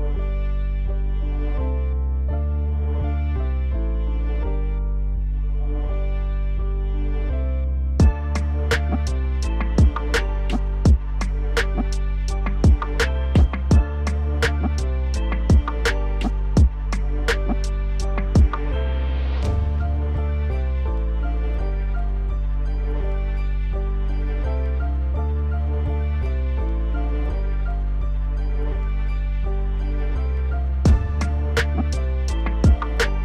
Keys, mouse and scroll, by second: 0.3 scroll down 3, 0.5 middle click, 0.9 click, 1.9 KP_1, 2.5 scroll up 2, 2.7 shift+middle click, 3.4 e, 9.4 s, 11.1 Tab, 11.4-12.1 scroll down 1, 12.1 shift+a, 13.5 s, 14.5 g, 15.6 s, 16.4 KP_7, 17.0 g, 18.4 KP_1, 18.9 scroll up 2, 19.2 shift+middle click, 19.6 s, 20.6 g, 21.9 middle click, 22.5 scroll down 1, 22.7-24.0 middle drag, 24.0 right click, 24.8-25.3 scroll down 1, 25.3 click, 25.8 click, 26.3-27.5 right drag, 27.5 click, 27.8-28.8 middle drag, 28.8 click, 29.2 click, 29.4 click, 30.0 shift+click, 30.5 ctrl+p, 31.5 KP_Divide, 32.3 KP_1, 32.8-33.2 scroll down 1.